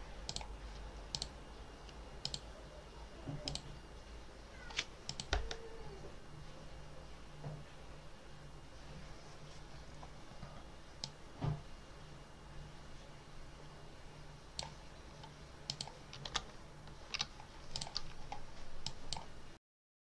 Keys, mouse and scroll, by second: 0.2 click, 1.0 click, 2.1 click, 3.3 click, 5.0 click, 10.9-14.6 drag, 15.6 click, 16.2 ctrl+s, 17.6 click, 18.7 click, 19.5 click, 20.0 ctrl+click.